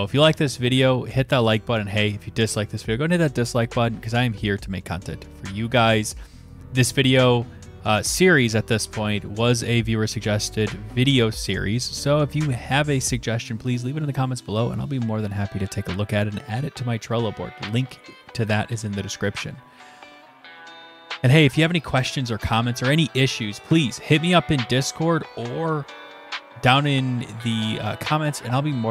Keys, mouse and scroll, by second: 10.4 click, 11.6 click, 20.9 click, 22.1 click.